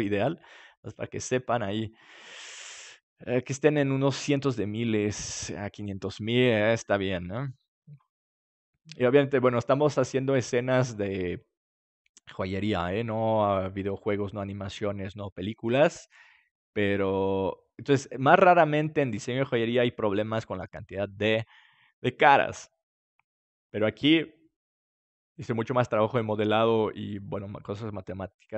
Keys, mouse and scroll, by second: 6.4-19.9 middle drag.